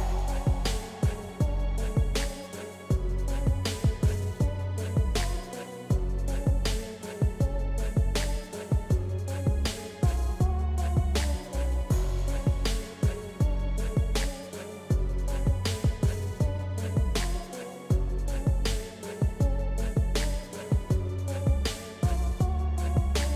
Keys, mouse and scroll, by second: 2.8 click, 6.1-11.4 drag, 14.7-16.6 drag, 16.6 ctrl+z.